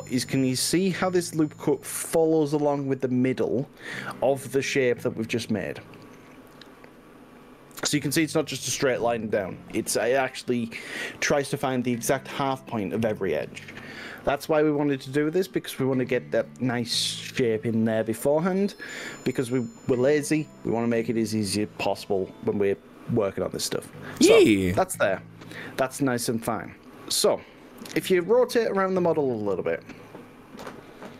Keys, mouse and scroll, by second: 1.7-8.0 middle drag, 8.0 scroll up 1, 29.9-31.1 middle drag.